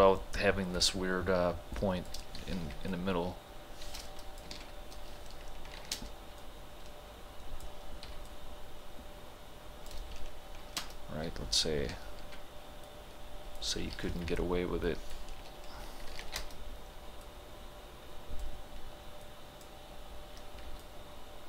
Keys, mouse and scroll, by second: 1.8 shift+click, 2.7 t, 2.9-4.6 drag, 4.6 ctrl+z, 5.8 ctrl+h, 6.0 space, 6.4-8.1 drag, 8.1 t, 8.3-10.7 drag, 10.7 ctrl+h, 10.8 space, 13.0-14.2 drag, 14.4-16.3 drag, 16.3 ctrl+h, 16.4 space, 17.3-19.3 drag, 19.6-20.7 drag, 20.7 t, 20.8-21.4 drag.